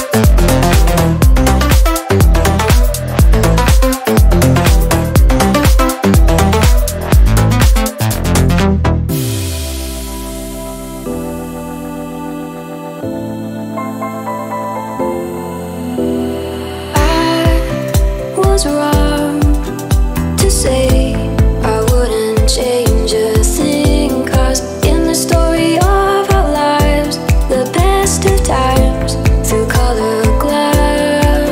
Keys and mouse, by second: 2.4-5.2 drag, 5.2 ctrl+right click, 6.3 click, 6.8-9.8 drag, 9.9 click, 10.1-16.7 drag, 17.4 click, 19.3 click, 20.0 click, 21.1-22.7 drag, 23.3-25.8 middle drag, 25.8-26.2 drag, 26.2-27.8 middle drag, 27.8 click, 28.4 click, 28.6 click, 29.2-31.2 middle drag, 31.2 click.